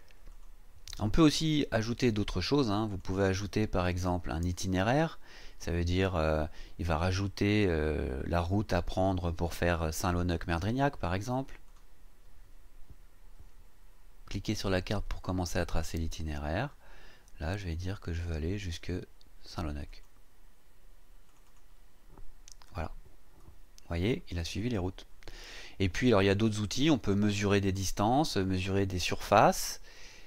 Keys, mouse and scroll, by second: 0.3 click, 2.9 click, 11.6 click, 15.4 click, 19.9 click, 21.3 click.